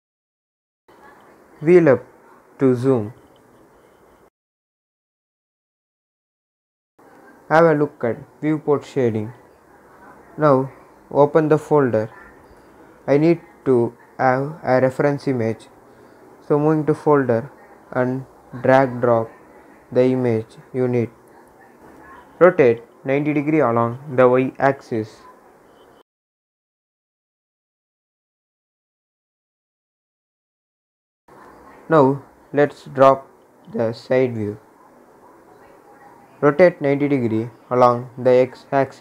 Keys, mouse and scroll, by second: 0.0 typing, 1.6 Return, 2.9 scroll up 1, 6.3 click, 8.5-19.1 drag, 19.2 scroll down 1, 20.3 click, 22.2 r, 24.3 Return, 25.4-28.6 drag, 30.6-36.5 drag, 36.5 r.